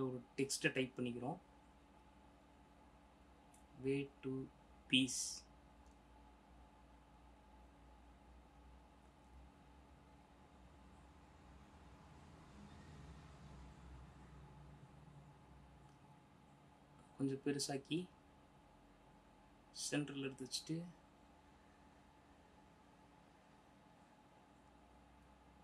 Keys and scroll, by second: 0.9 t, 3.0-7.3 typing, 9.1 ctrl++, 11.7 BackSpace, 12.0 Return, 13.6 ctrl+Return, 14.3 ctrl+-, 14.9 ctrl+t, 22.7 ctrl+Return, 23.0 space.